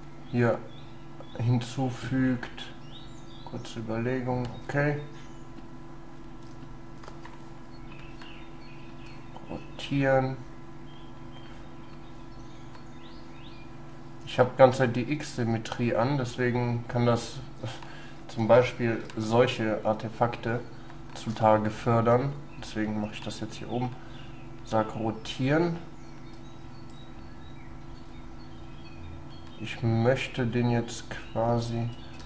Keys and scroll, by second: 18.5 ctrl+z, 19.1 ctrl+y, 20.0 ctrl+y, 31.8 x.